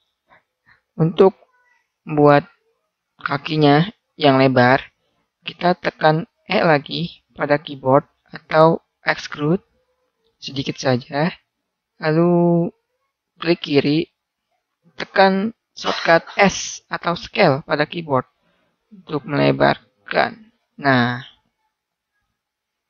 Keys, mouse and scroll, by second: 2.3 middle click, 9.5 e, 14.0-16.0 drag, 17.4 s, 20.5 click, 20.7-21.7 drag.